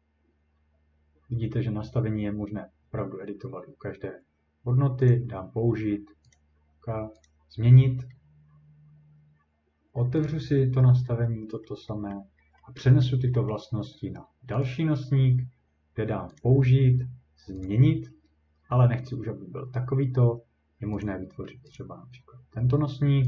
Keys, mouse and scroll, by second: 5.1 click, 6.3 click, 7.3 click, 7.9-9.0 scroll, 10.2 click, 11.7 middle click, 12.1-13.6 scroll, 14.6 click, 16.4 click, 17.7 click, 21.0 click, 21.8 click.